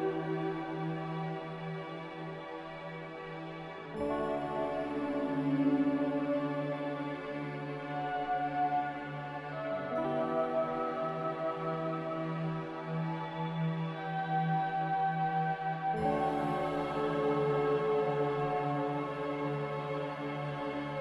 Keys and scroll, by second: 0.5 z, 1.9 Delete, 2.9 a, 10.1 s, 11.7 a, 13.2 a, 14.0 s, 15.5-17.2 typing, 20.6 n.